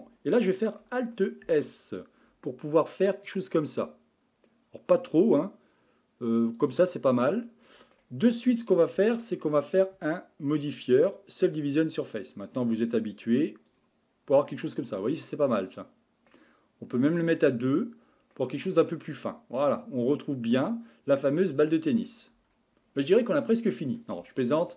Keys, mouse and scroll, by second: 1.4 alt+s, 7.2-9.0 middle drag, 9.0 Tab, 11.1 click, 12.1 click, 13.8 click, 14.6-17.7 middle drag, 17.7 click, 18.3-21.4 middle drag, 22.3 Tab.